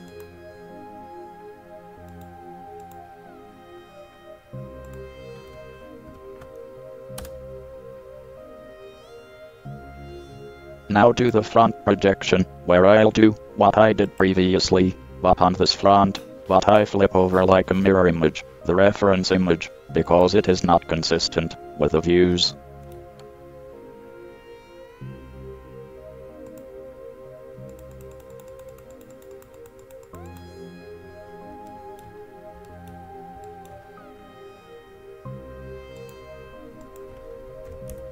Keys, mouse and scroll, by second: 11.4-13.1 drag, 15.4-17.7 middle drag, 15.4-15.8 scroll up 1, 20.3-22.2 drag, 22.7-23.4 middle drag, 31.9-32.4 middle drag, 32.9 middle drag, 33.7 middle drag, 34.0-36.2 middle drag.